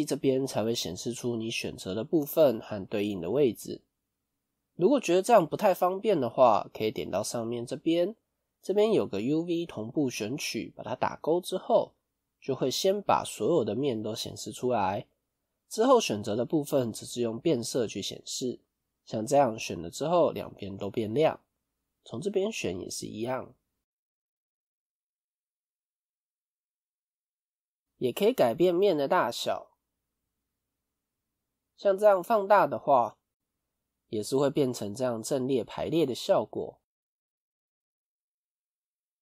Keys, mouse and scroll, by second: 24.8 middle click, 25.7-26.4 scroll up 2, 26.4 middle click, 27.1 a, 33.7 middle click, 37.2 middle click, 38.5 s.